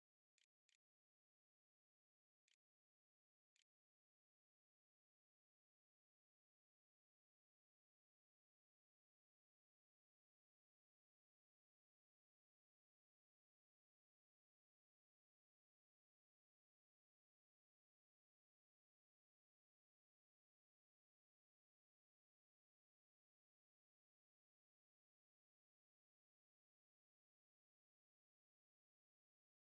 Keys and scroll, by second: 0.0-2.1 typing, 2.9 ctrl+z, 3.4 ctrl+s, 4.2 a.